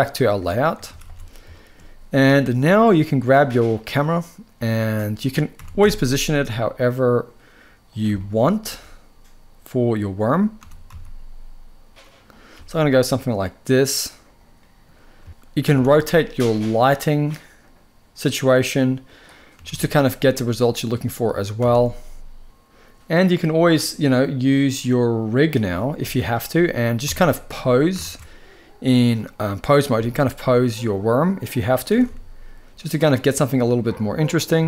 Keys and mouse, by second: 0.6 ctrl+s, 0.8 ctrl+s, 1.2 shift+middle click, 2.9 click, 4.3-5.0 drag, 5.3 r, 5.5 z, 7.6 click, 7.9 shift+middle click, 8.3 g, 10.3 r, 10.6 z, 12.0 click, 12.2 g, 15.0 shift+middle click, 15.4 r, 15.5 r, 18.7 click, 19.2 r, 19.4 r, 21.2 r, 21.4 r, 25.1 click, 25.7 z, 26.7 Tab, 27.7 ctrl+Tab, 29.7 g, 31.2 click, 31.6 r, 31.7 r.